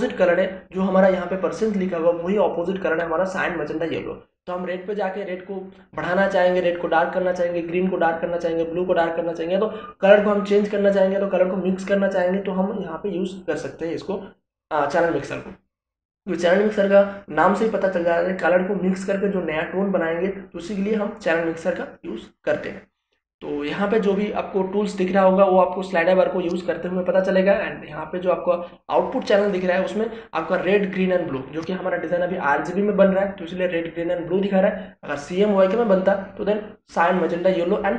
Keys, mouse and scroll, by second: 28.6 click.